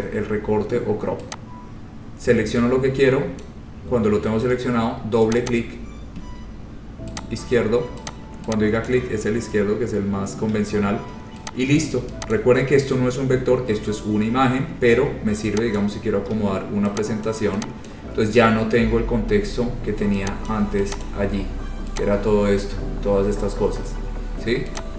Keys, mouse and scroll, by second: 4.6 click, 5.5 click, 5.6 click, 7.4 click, 8.3 click, 9.1 click, 9.5-10.2 scroll, 12.0 shift+click, 12.5 click, 12.8-13.9 scroll, 14.7-15.4 scroll, 15.9 click, 16.2 scroll, 17.1 scroll down 11, 17.4 shift+click, 18.1 click, 18.2 scroll down 3, 19.6-20.3 scroll, 20.6 click, 21.2 click, 22.2 click.